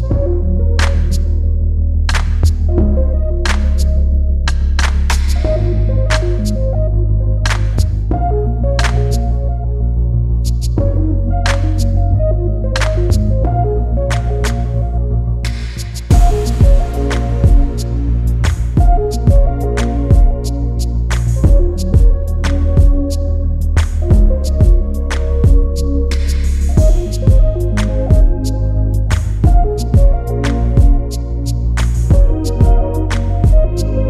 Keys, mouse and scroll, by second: 0.1 shift+click, 1.9 click, 2.8 click, 3.7 KP_2, 3.9 KP_0, 4.1 KP_Enter, 7.2 click, 7.8 space, 8.9 ctrl+d, 9.9 ctrl+d, 10.4-12.7 ctrl+drag, 13.1 ctrl+Delete, 14.3-14.8 scroll up 2, 15.1-15.6 scroll up 2, 17.4-18.4 ctrl+scroll up 2, 18.4-20.4 ctrl+scroll up 1, 21.0-21.3 ctrl+scroll up 2, 22.7-23.0 scroll up 2, 23.8 Delete, 25.5 click, 26.7 ctrl+d, 27.6-30.5 ctrl+drag, 31.3 click.